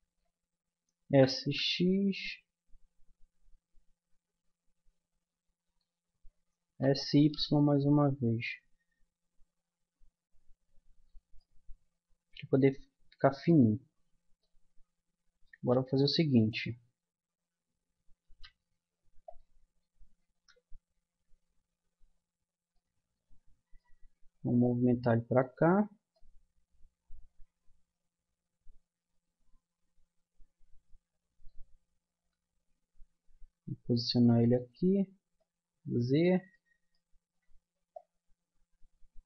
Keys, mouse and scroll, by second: 1.0 s, 6.6 s, 11.4-15.6 middle drag, 15.6 g, 16.8 middle click, 18.3 g, 20.3 KP_1, 22.7 middle click, 23.3-24.6 middle drag, 24.6-26.1 drag, 26.1-28.0 middle drag, 31.9-33.5 middle drag, 33.5 g, 35.4-36.6 drag.